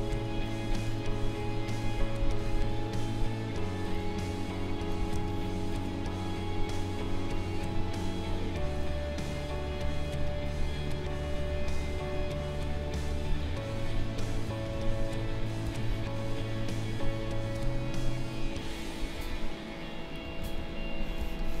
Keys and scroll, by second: 1.0 Delete, 9.6 Delete, 18.9 Delete, 21.1 space.